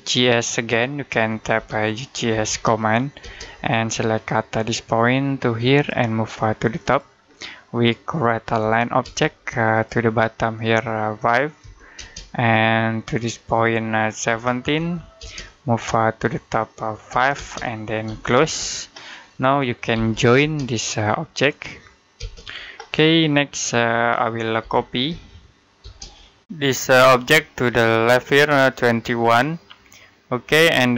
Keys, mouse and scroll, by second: 1.4-3.0 typing, 4.3 click, 7.2 middle click, 8.3 l, 8.9 space, 9.6 click, 11.5 5, 11.8 space, 14.1-15.0 typing, 16.9 5, 17.2 space, 17.9 c, 18.2 space, 19.2 middle click, 19.8 j, 20.2 space, 20.6 click, 22.0 space, 22.9 middle click, 24.2-25.6 typing, 26.3 click, 27.3 space, 27.5 click, 29.2-29.8 typing.